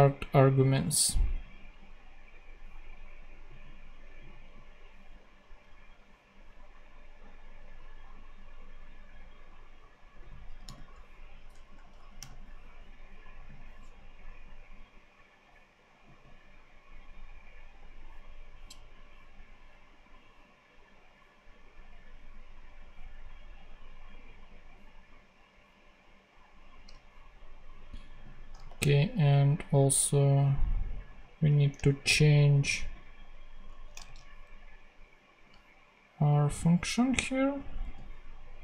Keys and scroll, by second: 10.5 m, 11.4 BackSpace, 12.1 ,, 33.6 shift+Right, 33.9 shift+super+c, 34.9 super+c, 37.7 super+v.